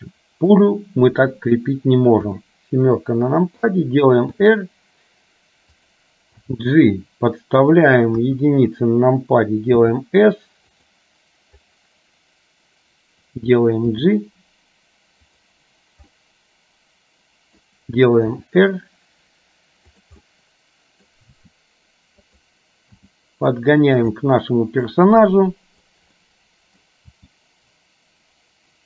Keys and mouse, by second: 0.2 click, 2.4 KP_7, 4.5 r, 6.5 g, 8.2 KP_1, 10.0 s, 14.1 g, 16.2-17.7 middle drag, 18.5 r, 20.4 middle click, 23.0 g, 24.4 middle click, 26.2 middle click, 27.2 g.